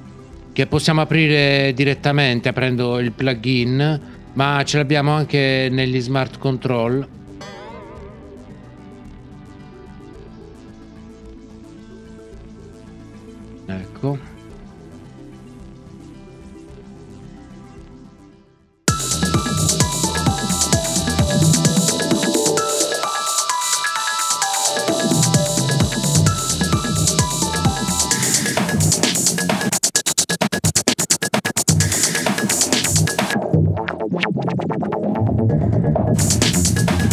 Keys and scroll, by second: 7.3 b.